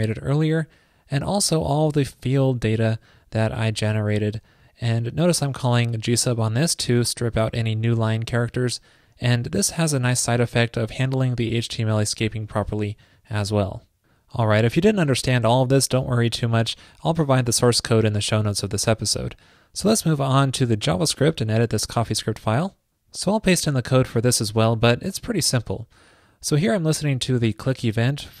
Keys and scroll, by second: 24.2 super+v.